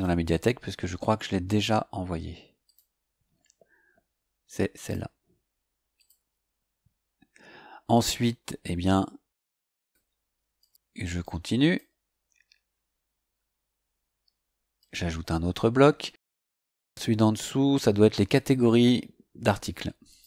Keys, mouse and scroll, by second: 2.6 click, 4.8 click, 5.9 click, 7.9 click, 9.1 scroll down 2, 9.7 click, 10.6 click, 11.6 click, 12.1-12.7 scroll down 2, 14.7 click, 16.6 click, 18.7 click, 20.0 click.